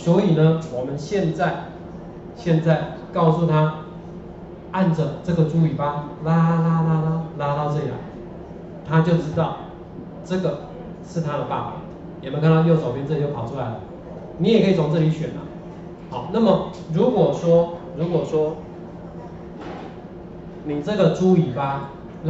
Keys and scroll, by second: 1.3 ctrl+4.